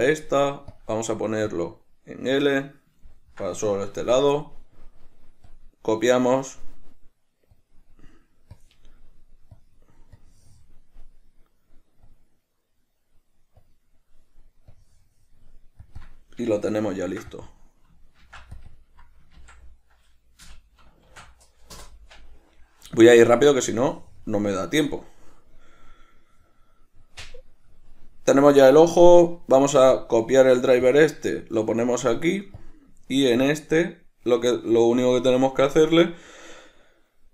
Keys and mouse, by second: 1.0-3.4 drag, 3.4-5.7 ctrl+middle drag, 5.7-16.2 drag, 16.3 click, 17.6 click, 17.7-18.9 drag, 18.9-25.1 drag, 22.1 Return, 25.1-27.5 shift+middle drag, 27.5 click, 29.4-31.1 right drag, 31.1 click, 31.9-35.9 right drag, 35.9 click.